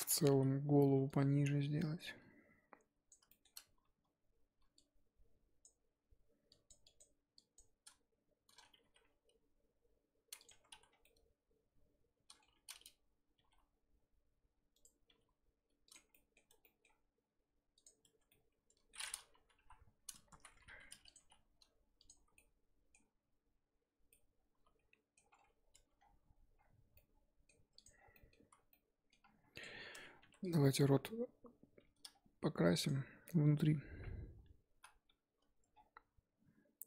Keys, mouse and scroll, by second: 0.1 Tab, 0.3 z, 0.8 1, 1.0 click, 3.3 shift+middle click, 3.5-3.9 scroll up 1, 4.7 shift+click, 6.5-8.8 shift+drag, 8.8 g, 10.5 Tab, 10.7 z, 10.9 scroll down 4, 11.0-12.4 middle drag, 12.4 Tab, 13.3 g, 15.0 g, 16.0 scroll up 1, 16.1 middle click, 16.5 Tab, 16.6 middle click, 16.9 scroll up 3, 17.7 click, 18.0 Tab, 18.3 middle click, 19.0-19.5 scroll up 2, 19.5-22.1 typing, 19.9-20.3 scroll up 2, 22.3-25.3 middle drag, 25.3-25.7 scroll down 2, 25.7 Tab, 26.2-26.6 scroll down 5, 26.6-26.9 scroll up 3, 26.9 middle click, 27.7 click, 28.0 scroll down 1, 28.1 middle click, 28.3 z, 28.7 middle click, 29.1 scroll down 1, 29.2-30.2 scroll up 8, 29.5 click, 29.9 Tab, 30.2 3, 30.4 click, 32.7 shift+click, 34.7 ctrl+KP_Add, 35.7-36.8 scroll down 3.